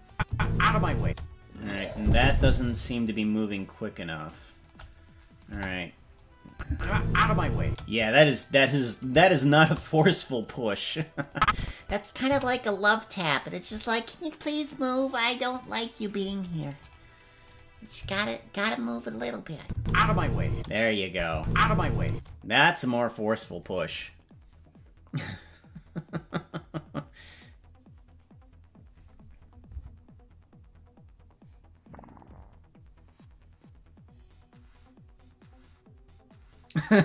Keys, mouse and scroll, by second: 0.1 click, 0.3 space, 1.0 space, 3.2-4.4 drag, 5.5 KP_0, 6.5 click, 6.7 space, 7.6 space, 8.3-11.3 right drag, 11.3 click, 12.3 s, 15.6 right click, 16.8 right click, 17.5 right click, 18.0 g, 19.6 click, 19.7 space, 20.5 space, 21.1 click, 21.3 space, 22.1 space.